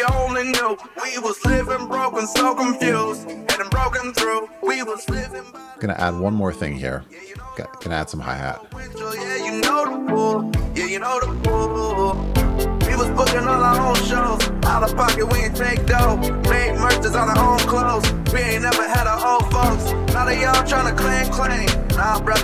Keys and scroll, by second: 4.8 super+c, 8.8 super+v.